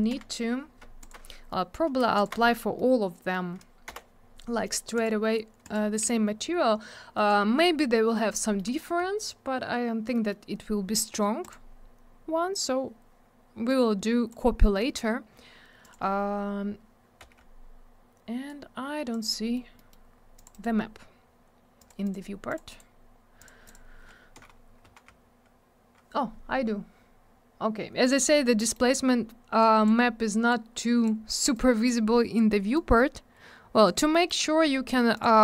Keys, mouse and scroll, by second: 0.1 F4, 1.0 ctrl+click, 1.5 middle click, 2.2 ctrl+click, 2.2 ctrl+click, 2.8 middle click, 3.9 m, 4.7 middle click, 4.8 middle click, 5.0 click, 5.0 double click, 5.7 click, 5.7 click, 7.2 click, 7.3 click, 8.3 scroll down 1, 8.6 middle click, 8.7 middle click, 9.0 scroll up 1, 10.1 middle click, 10.3 middle click, 11.4 click, 11.5 click, 13.7 click, 15.8 click, 15.9 click, 17.2 m, 18.5 click, 19.3 middle click, 19.8 middle click, 19.9 middle click, 20.1 scroll up 1, 20.4 click, 20.4 click, 20.5 right click, 20.6 right click, 21.8 click, 21.9 click, 22.0 click, 22.1 click, 22.5 click, 22.6 double click, 22.7 right click, 22.8 right click, 23.4 click, 23.5 click, 23.7 click, 23.7 click, 24.4 F3, 26.0 F4, 26.5 scroll up 1, 28.6 middle click, 28.8 middle click, 29.6 click, 30.5 click, 31.6 click, 32.8 click, 34.1 middle click, 34.3 middle click, 35.2 click, 35.3 click.